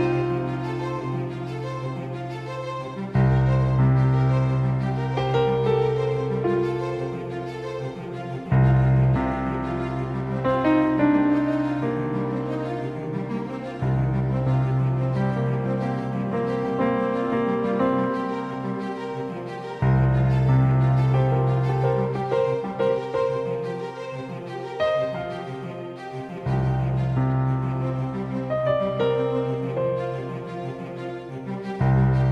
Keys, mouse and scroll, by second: 1.8-5.2 drag, 3.2-5.2 right drag, 5.9 click, 6.5 right click, 8.5-9.8 drag, 8.6-11.0 right drag, 11.0 g, 13.0-15.0 right drag, 13.5 g, 15.9 g, 19.4 g, 21.2 right click, 24.0-26.3 right drag, 25.5 g, 28.5-30.9 right drag, 28.9 g.